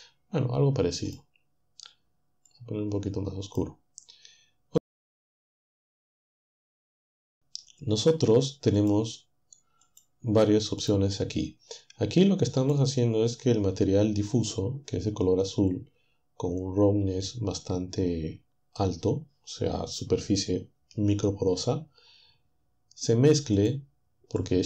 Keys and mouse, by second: 1.1 click, 2.5-3.8 drag, 4.8-6.1 drag, 8.8 click, 9.8 click, 10.8 click, 12.6 click, 23.6-24.6 drag.